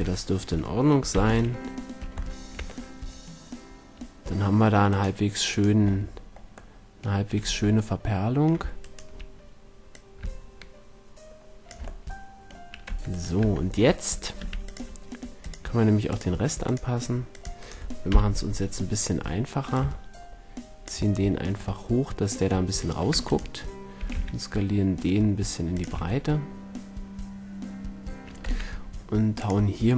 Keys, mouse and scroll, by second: 1.0 z, 4.8-6.0 right drag, 6.0-6.8 middle drag, 6.8 right drag, 7.4 Tab, 8.7-9.8 right drag, 9.8 middle click, 10.6-11.7 drag, 12.8 Tab, 13.0-13.7 drag, 13.3 Tab, 14.3 c, 17.7 click, 17.9 right click, 18.0 KP_1, 21.2 drag, 21.5-22.0 middle drag, 23.0 Tab, 23.6-25.0 right drag, 23.9 s, 25.0-26.4 drag, 25.8 a, 28.4 Tab, 29.3-29.9 drag.